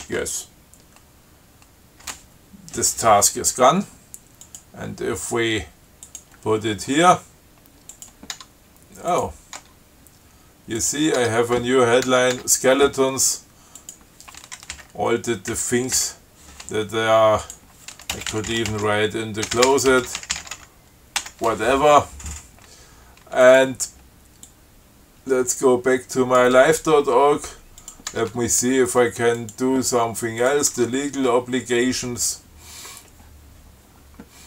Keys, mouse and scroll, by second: 0.3 y, 4.7 click, 6.3 click, 8.2 click, 8.6 Tab, 9.4 click, 9.8 Tab, 11.0 click, 11.4 Tab, 12.6 Tab, 14.0 click, 15.0 Up, 15.8 Down, 16.2 Delete, 17.7 click, 18.3-21.6 typing, 23.7 click, 24.7-26.8 drag, 28.0 click, 28.4 Tab, 29.6 click, 30.7 click, 31.0 Tab.